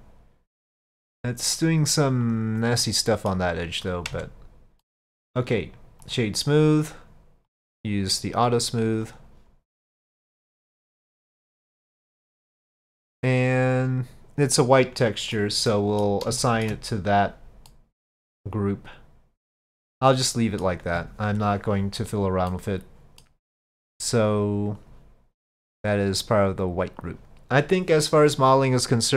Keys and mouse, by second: 2.8 click, 4.2 Tab, 4.8-5.2 middle drag, 5.7 click, 7.6 click, 9.1 click, 10.0-10.5 middle drag, 10.9 click, 11.5-15.4 middle drag, 15.7-16.1 middle drag, 16.4 shift+middle drag, 17.8-20.7 middle drag, 22.5-23.1 middle drag, 23.1 click, 24.2 click, 24.8 click, 25.7-27.1 drag.